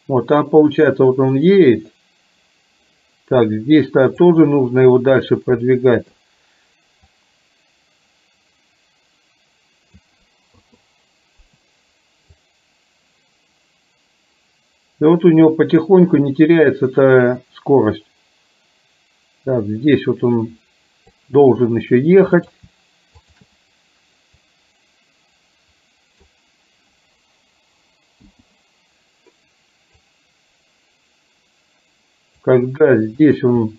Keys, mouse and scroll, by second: 6.0 shift+click, 7.2-10.0 drag, 10.8 i, 12.4-21.3 drag, 22.4 click, 23.3 shift+click, 24.4-26.5 drag, 28.3 i, 30.2-32.7 drag, 33.3 click.